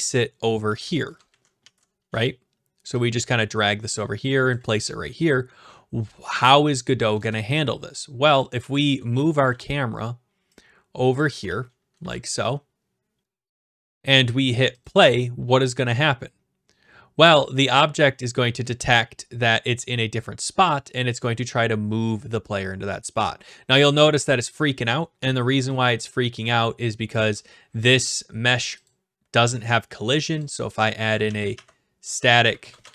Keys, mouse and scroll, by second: 0.5 click, 0.5-2.5 typing, 2.1 right click, 4.5-6.9 typing, 4.5 click, 7.2 shift+right click, 8.4 click, 8.5-9.7 typing, 9.6 right click, 11.2 click, 11.5 w, 12.0 a, 12.4 right click, 13.2 click, 13.2 shift+w, 13.8 right click, 14.9 click, 24.5 click, 25.5 d, 26.1 w, 27.3 right click, 28.9 click, 29.7 right click, 30.4 click, 31.0-32.9 typing.